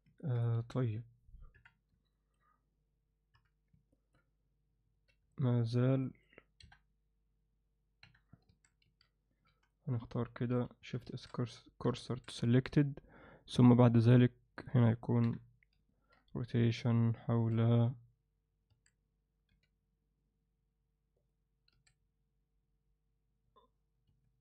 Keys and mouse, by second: 0.2 ctrl+alt+middle click, 1.5 alt+a, 1.5 KP_1, 2.1 ctrl+alt+middle click, 3.3 KP_3, 3.9 ctrl+alt+middle click, 4.9 z, 5.3 alt+middle click, 6.0 alt+middle click, 6.6 KP_7, 8.5 KP_7, 8.5 a, 9.5 c, 11.1 shift+s, 14.0-14.6 drag, 15.2 KP_3, 16.6 r, 18.7 a, 19.5 r, 21.7 s.